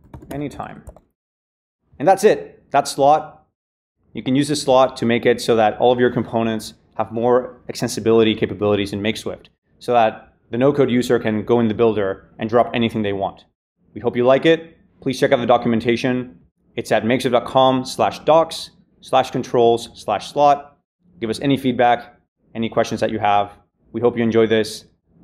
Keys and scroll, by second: 0.0-1.3 typing.